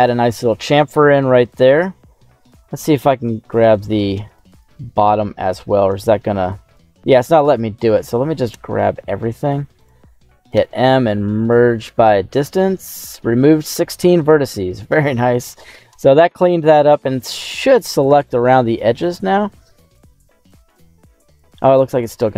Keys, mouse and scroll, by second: 0.7 middle click, 2.8 alt+shift+right click, 3.5 right click, 3.9 right click, 4.2 alt+shift+right click, 4.5 alt+shift+right click, 5.0 middle click, 6.6 alt+shift+right click, 7.2 scroll down 1, 8.4 a, 9.7 click, 10.5 m, 14.0 middle click, 14.9 shift+middle click, 15.4-15.9 scroll up 1, 15.9 scroll up 1, 16.8 click, 17.6 scroll up 1, 18.0 right click, 19.9 alt+shift+right click, 20.6 alt+shift+right click, 21.2 shift+right click, 21.6 shift+middle click, 22.1 middle click.